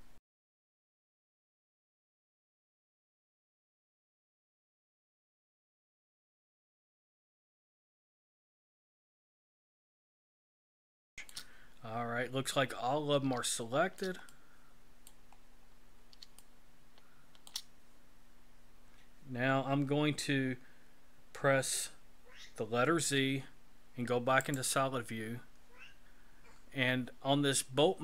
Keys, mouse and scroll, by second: 0.4 c, 1.2 shift+middle click, 1.9 c, 2.7 shift+middle click, 3.4 c, 4.5 shift+middle click, 6.7 c, 8.3 shift+middle click, 8.8 c, 9.6 shift+middle click, 10.1 c, 10.9 shift+middle click, 11.8-13.2 scroll down 11, 13.5 shift+middle click, 14.3 middle click, 15.4-16.1 scroll down 6, 16.4 shift+middle click, 23.0 z.